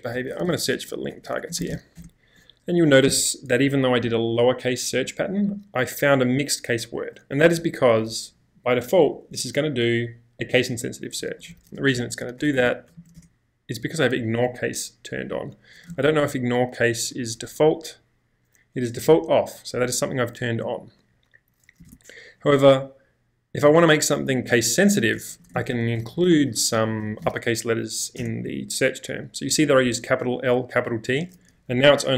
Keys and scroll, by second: 0.0-1.5 typing, 3.3 typing, 7.6-9.1 typing, 10.5-13.5 typing, 15.6-17.1 typing, 21.9 space, 21.9 q, 24.7-27.7 typing, 28.3 Return, 31.3 typing.